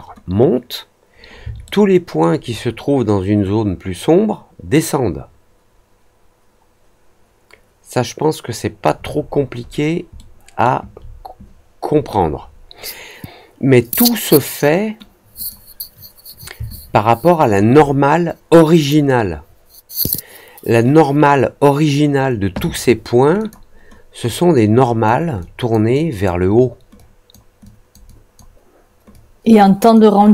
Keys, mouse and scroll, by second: 1.6-2.1 alt+middle drag, 2.4-8.8 alt+drag, 9.2 alt+middle click, 9.6 alt+middle click, 10.1-10.6 alt+middle drag, 15.3 click, 16.7-17.5 alt+drag, 23.3 click, 24.2-25.0 drag, 25.3-25.6 drag, 25.9-26.2 drag, 26.9-27.2 drag, 27.6 drag, 28.0 drag, 29.0 click, 30.2 drag.